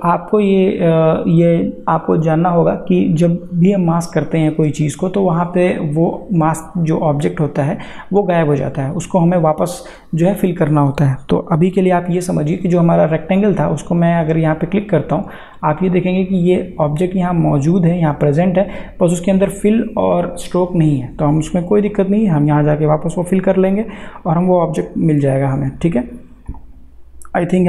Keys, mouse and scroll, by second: 10.3 click, 14.8 click, 21.9 click, 26.5 click.